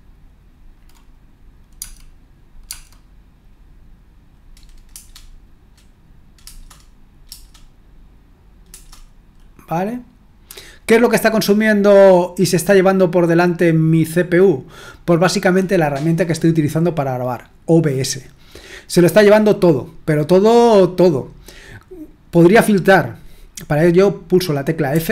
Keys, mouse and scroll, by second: 4.9 Return, 6.4 Return, 7.2 typing, 8.6 Return, 24.9 f.